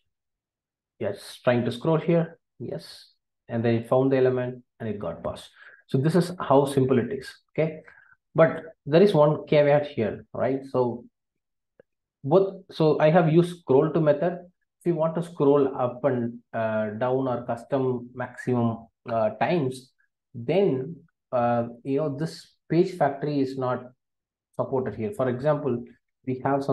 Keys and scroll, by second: 8.0 super+b.